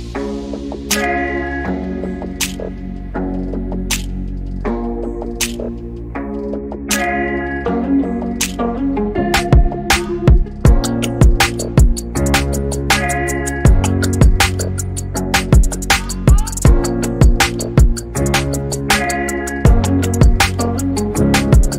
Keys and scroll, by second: 1.2 b, 2.5 b, 12.4-14.9 typing, 15.8 Return.